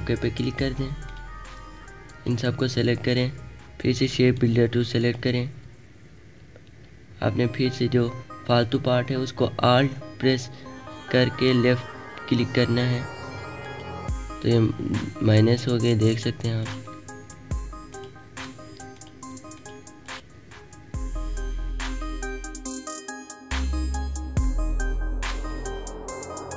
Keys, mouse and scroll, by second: 0.6-3.9 drag, 3.9 right click, 4.9 click, 5.8 alt+scroll up 1, 6.5-6.9 alt+scroll up 3, 13.6 alt+click, 16.6 alt+click, 17.8 alt+click, 18.4 alt+scroll up 1, 18.9 alt+click, 20.3 alt+click, 21.0 alt+click, 21.6 click, 22.9 click, 24.5 space, 24.5 click, 24.8 alt+scroll down 1, 25.6 alt+scroll up 1, 25.8 space, 25.9 click, 26.3 alt+scroll up 1.